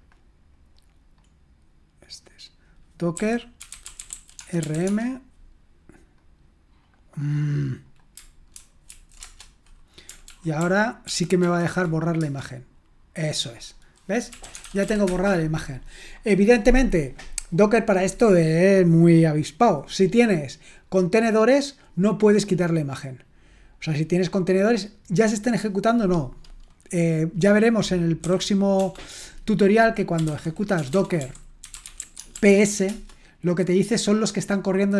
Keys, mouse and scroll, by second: 0.8 click, 1.4-2.2 scroll up 1, 2.2-3.2 scroll down 1, 2.9-5.3 typing, 6.8 click, 7.7 click, 8.9 ctrl+alt+v, 9.2 Return, 10.3 ctrl+p, 10.6 ctrl+p, 11.1 ctrl+p, 11.4 ctrl+p, 12.2 Return, 14.0-15.5 typing, 28.0-28.8 typing, 29.9-32.9 typing.